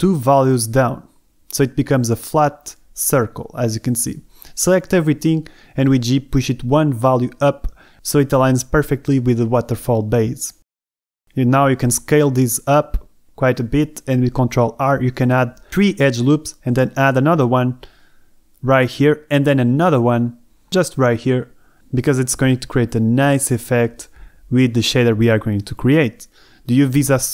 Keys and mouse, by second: 0.0 KP_2, 0.4 KP_Enter, 3.5 middle click, 4.6 shift+middle click, 4.7 Escape, 4.7-8.3 typing, 9.3 KP_Enter, 10.4 middle click, 11.1 s, 12.2 click, 13.2 ctrl+r, 17.8 Escape, 18.5 ctrl+r, 20.4 Escape, 21.1 ctrl+r, 21.9 Escape, 25.0-26.7 middle drag, 26.7 z.